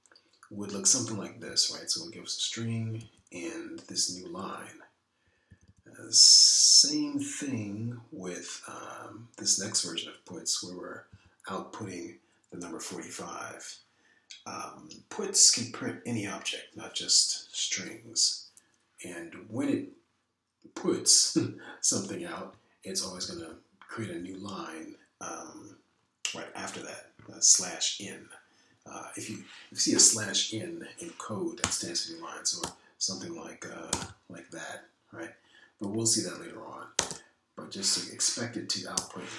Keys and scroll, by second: 0.2 Down, 2.4 Right, 2.6 Right, 2.7 Right, 2.8 Right, 4.0 Down, 6.2 Down, 6.4 Down, 6.6 Down, 12.1 Left, 24.0 Down, 25.0 Down, 32.6 o, 33.6 BackSpace, 34.6-35.5 typing, 38.0 BackSpace, 38.1 BackSpace.